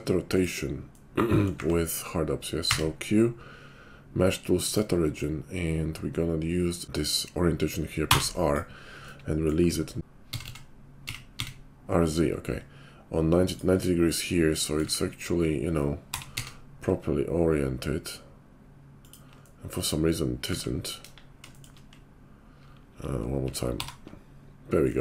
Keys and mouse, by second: 0.2 click, 0.3-12.6 middle drag, 2.6 q, 10.0 r, 12.6-13.7 ctrl+drag, 13.7-25.0 middle drag, 14.9 `, 15.9 r, 21.0 KP_5, 23.7 alt+r.